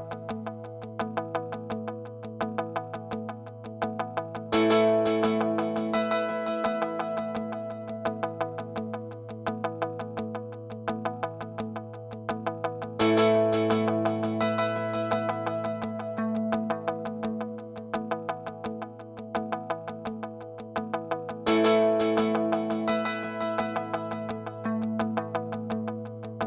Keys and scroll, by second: 1.0 super+s, 2.1-4.0 typing, 5.7 space, 9.8 space, 15.4 space.